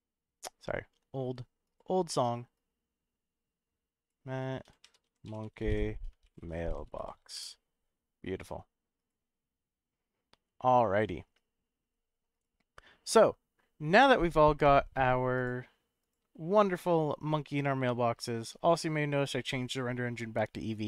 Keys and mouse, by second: 15.3 click, 17.2-17.7 middle drag.